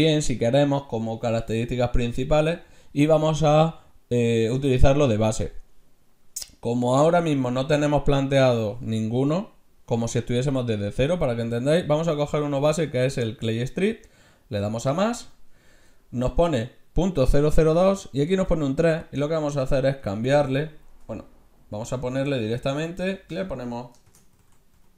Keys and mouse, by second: 14.8-17.1 drag, 19.0-22.4 drag, 22.4 BackSpace, 23.3 BackSpace.